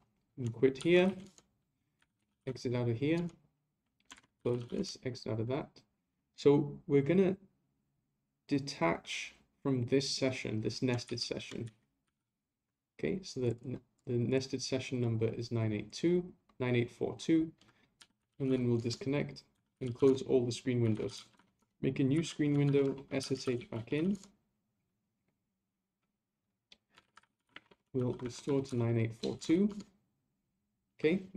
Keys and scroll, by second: 4.1 ctrl+c, 11.0 ctrl+a.